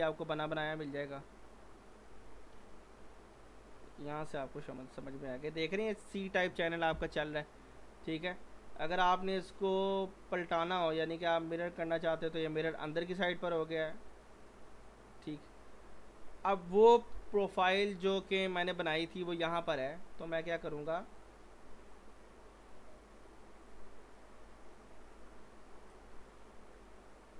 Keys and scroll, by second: 2.2 f, 2.5 z, 4.3 g, 17.1 p.